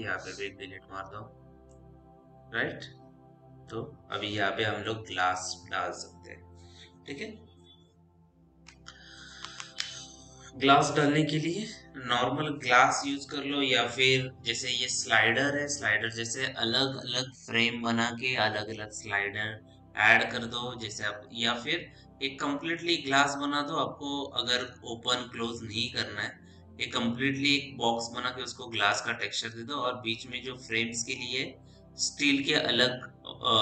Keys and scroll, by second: 0.1 Delete.